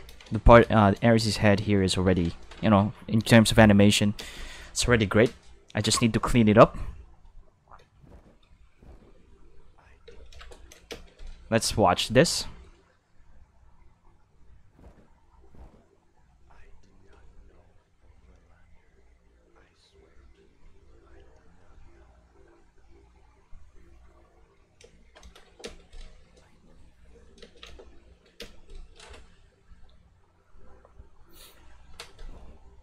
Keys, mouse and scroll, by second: 0.1 ctrl+space, 0.8 shift+middle drag, 1.4 shift+middle click, 2.0 ctrl+s, 4.2 space, 10.0 space, 10.9 space, 12.3 shift+middle click, 24.8 space, 25.6 space, 27.4 space, 28.4 space.